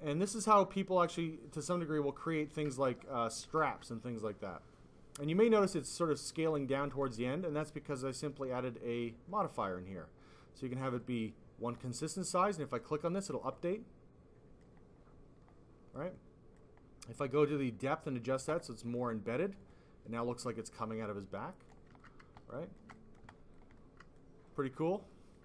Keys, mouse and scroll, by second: 0.0 click, 2.5 alt+click, 2.7 click, 2.8 click, 3.5 alt+click, 6.5 click, 7.9 click, 8.3 click, 9.4 click, 12.6 click, 13.5 click, 16.1 click, 17.2 click, 18.6 click, 19.5 click, 20.1 click, 21.9 alt+click, 22.5 alt+click, 22.9 click, 23.1 click, 23.3 alt+click, 23.7 alt+click, 24.4 click, 25.1 alt+click.